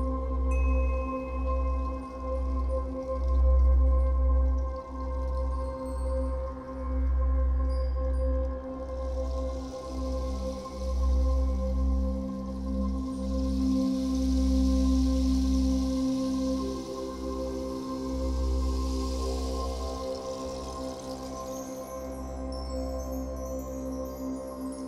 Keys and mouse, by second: 0.0-3.3 drag, 4.5 g, 4.9 z, 5.8 Escape, 6.9-7.3 typing, 7.9 click, 9.2 typing, 10.8 typing, 11.3 click, 11.8 typing, 12.0 ctrl+alt+click, 13.7-14.8 alt+drag, 15.1 ctrl+alt+click, 15.6 alt+click, 16.1 alt+shift+click, 17.1 click, 17.1-17.8 typing, 18.6-20.3 drag, 20.3 g, 20.5 y, 22.1-23.8 drag, 23.9-24.4 typing, 24.7-24.8 ctrl+alt+drag.